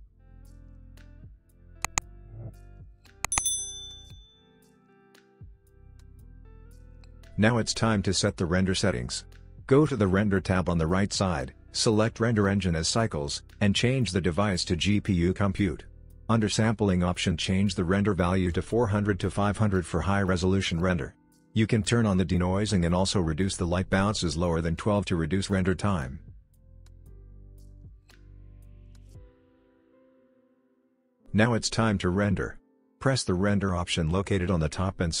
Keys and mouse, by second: 0.4 middle click, 1.0 middle click, 1.7 click, 2.3 middle click, 2.6 Tab, 3.0 g, 3.6 middle click, 3.7 g, 4.1 middle click, 4.2 KP_0, 5.3 middle click, 6.0 n, 9.3 click, 11.3-14.5 drag, 13.1 KP_0, 15.0 click, 16.7 click, 18.7 click, 19.4-22.3 drag, 25.5 click, 33.5-35.2 drag.